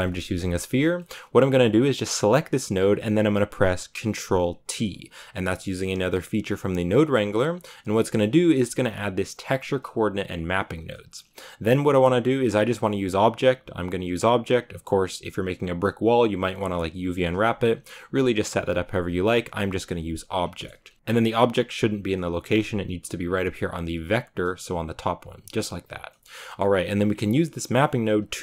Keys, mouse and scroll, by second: 4.6 ctrl+t, 5.1 a, 9.8-15.0 drag, 15.4 click, 17.2-28.4 drag.